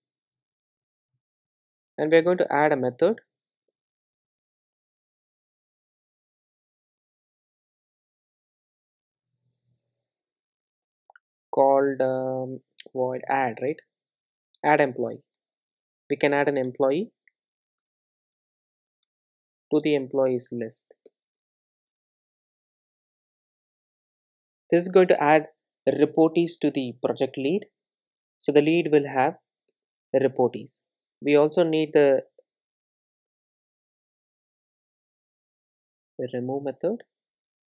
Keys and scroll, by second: 3.8 super+n, 11.6 Return.